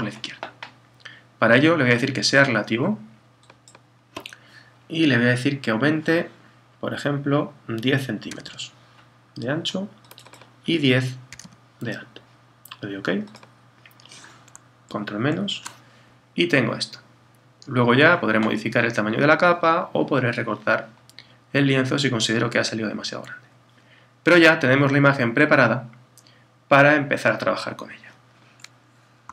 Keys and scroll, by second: 14.9 super+-.